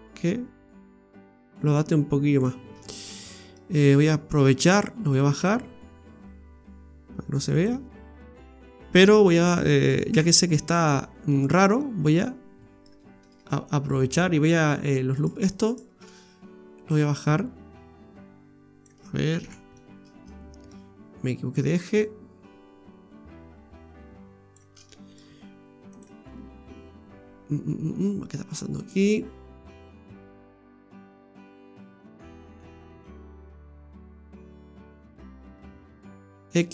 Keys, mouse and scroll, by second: 0.7 click, 2.8 middle click, 5.1 click, 10.1 KP_Divide, 10.8 scroll up 4, 11.3 middle click, 14.4 click, 15.2 right click, 15.5 alt+shift+right click, 15.9 right click, 16.9 click, 19.4 ctrl+z, 19.8 middle click, 21.5 click, 24.9 middle click, 25.9 click, 28.8 click, 29.5 right click, 29.9 shift+right click, 30.3 right click, 30.5 shift+right click, 31.7 click, 36.3 x.